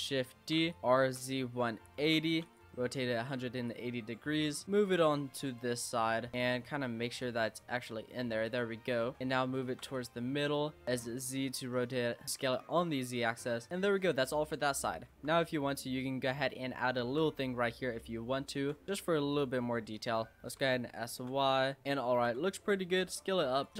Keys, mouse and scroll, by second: 0.0-0.8 typing, 2.7 middle click, 3.7 click, 4.6-7.2 middle drag, 7.2 click, 8.7 scroll down 1, 8.8-9.9 middle drag, 9.9 click, 10.8 s, 13.4 Tab, 13.7 scroll down 3, 13.7-14.8 middle drag, 14.8 scroll up 2, 15.1 Tab, 15.3 click, 17.0 shift+a, 18.6 shift+a, 18.9 middle click, 18.9-19.4 scroll up 1, 19.4 click, 20.2 middle click, 20.6 s, 21.8 click, 22.2 s, 23.7 Tab, 23.7 click.